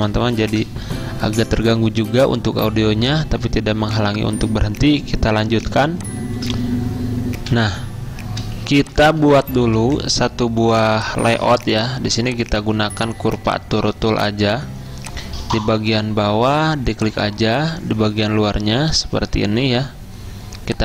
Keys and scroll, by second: 7.5 F10, 8.7 z.